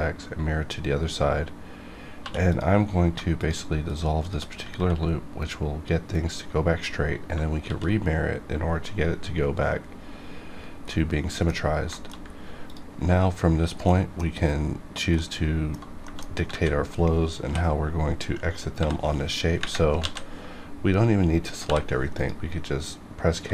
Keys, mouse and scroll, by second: 2.2 2, 2.4 click, 3.3 shift+click, 4.6 ctrl+x, 7.6 alt+x, 10.4 scroll down 1, 10.8 middle click, 12.1 shift+middle click, 12.1-12.6 shift+scroll up 1, 12.6 click, 13.8 middle click, 14.3-15.1 scroll up 1, 15.1 middle click, 16.4 scroll up 1, 16.5 alt+a, 17.3 l, 18.7 k, 19.9 alt+a, 21.6 k, 22.1 click, 22.2 click, 23.4 c.